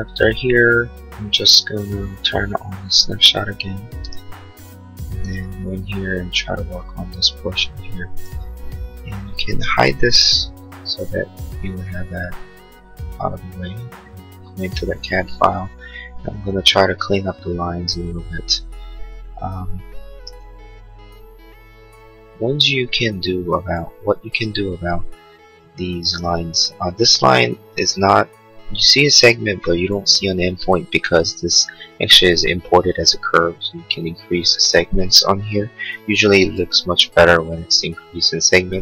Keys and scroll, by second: 10.0 h.